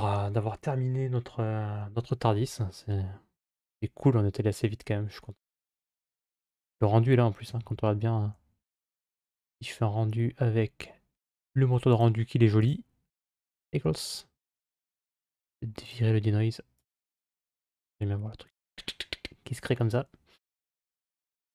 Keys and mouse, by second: 4.0-5.3 middle drag, 6.5 ctrl+s, 7.3 z, 11.8 click, 12.6-13.2 drag, 15.6 click, 16.6 click, 21.3 click.